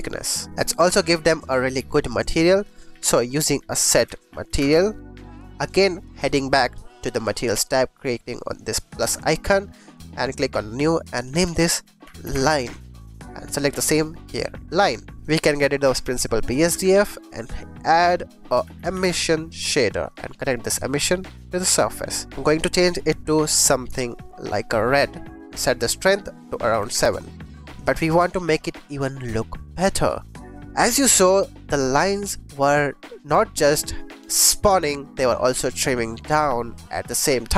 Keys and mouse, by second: 0.5 g, 1.4 click, 1.7 g, 1.9 click, 2.8 shift+a, 6.1 click, 7.2 click, 8.9 click, 9.6 click, 9.8 click, 10.2 middle click, 11.0 middle click, 11.1 middle click, 11.2-12.6 shift+drag, 13.6-14.7 drag, 15.1 click, 15.4 click, 16.0 x, 16.3 click, 16.6 shift+a, 19.1 s, 20.0 click, 20.6 click, 25.5-26.9 drag, 27.7 click, 28.7-29.4 shift+drag, 30.1 click, 30.7-31.1 shift+drag.